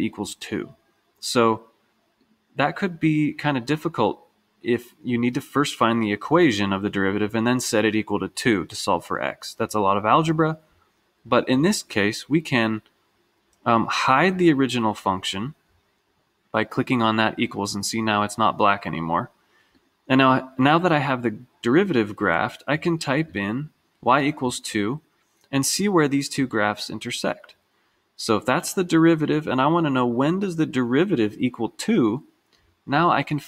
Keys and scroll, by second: 13.8 Left, 15.2 Return, 17.7 Down, 24.5 2, 28.5 2, 28.9 2.